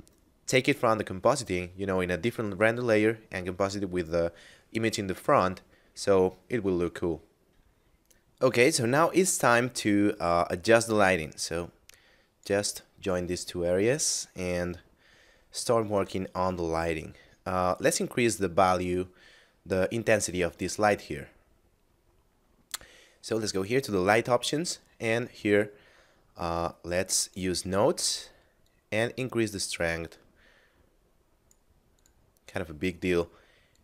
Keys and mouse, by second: 7.4 F9, 11.6 click, 13.6 middle click, 14.6 shift+middle click, 16.2 middle click, 17.6 right click, 19.6 middle click, 23.6 click, 27.0 click, 32.0 click.